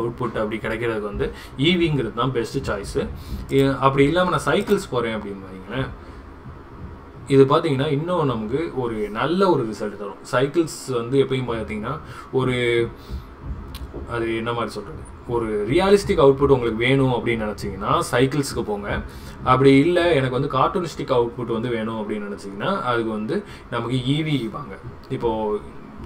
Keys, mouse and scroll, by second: 3.5-5.0 drag.